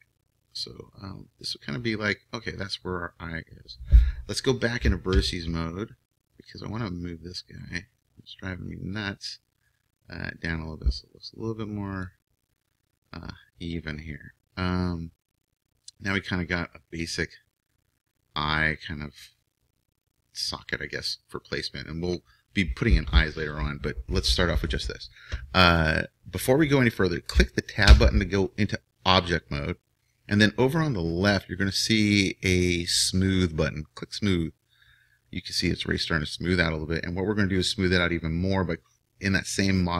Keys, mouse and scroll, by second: 5.2 ctrl+Tab, 7.6-11.2 right drag, 9.0-11.2 drag, 16.8-18.8 middle drag, 28.0 Tab, 34.0-36.8 drag.